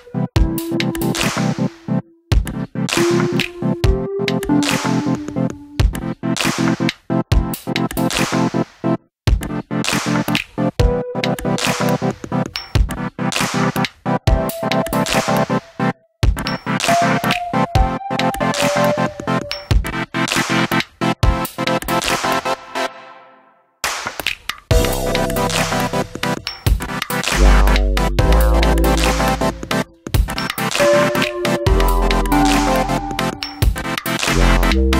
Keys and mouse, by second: 2.2-2.6 middle drag, 6.4 click, 8.9 click, 13.5 middle click, 13.8 Tab, 15.8 g, 16.5 click, 17.6 Tab, 17.7 shift+middle click, 18.1-18.8 middle drag, 19.4 KP_1, 20.5 drag, 22.7 middle click, 23.5 KP_3, 24.8 shift+d, 25.5 click, 26.2 s, 27.1 click, 27.3 g, 28.2 click, 29.8 a, 31.0 click, 32.3 click, 32.8-33.2 shift+middle drag, 34.1 Tab.